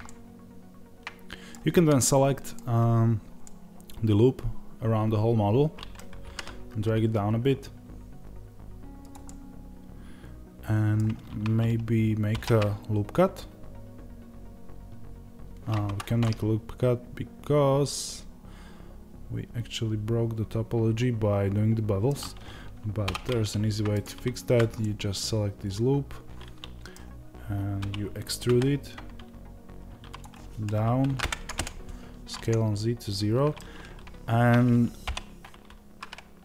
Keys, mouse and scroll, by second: 6.1 g, 9.0 click, 9.1 middle click, 12.2 ctrl+r, 16.1 middle click, 23.8 alt+click, 24.7-36.4 middle drag, 27.7 e, 34.9 o.